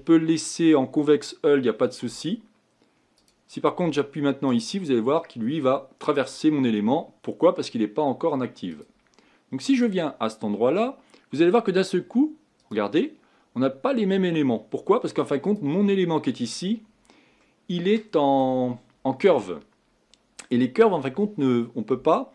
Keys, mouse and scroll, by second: 3.2-15.9 drag, 15.9 middle click, 16.8-17.4 scroll up 5, 17.4-19.5 middle drag, 19.5-22.0 scroll down 1, 22.0-22.3 scroll down 1.